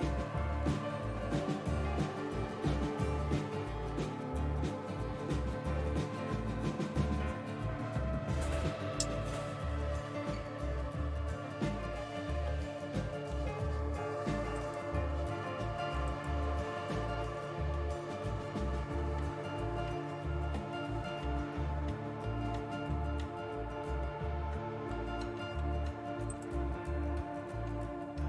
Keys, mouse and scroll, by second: 0.0 Tab, 0.0 Return, 0.0 typing, 6.8 super+2, 17.1-28.1 drag.